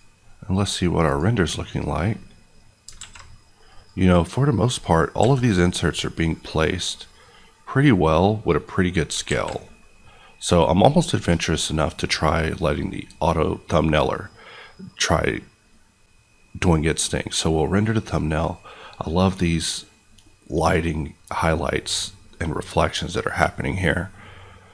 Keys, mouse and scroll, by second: 2.9 alt+a, 3.7 click, 5.1 s, 8.4 click, 9.3 alt+a, 16.6 click.